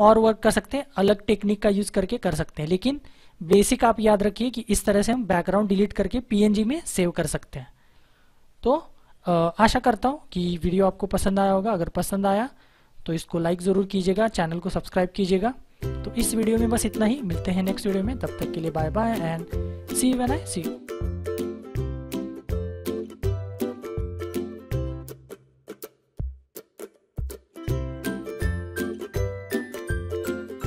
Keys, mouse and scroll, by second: 10.7 click.